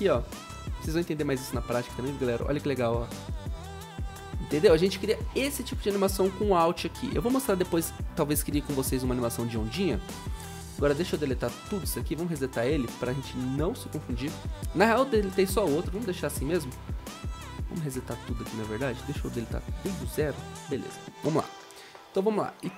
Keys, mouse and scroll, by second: 1.9 typing, 9.5 Delete, 15.6 0.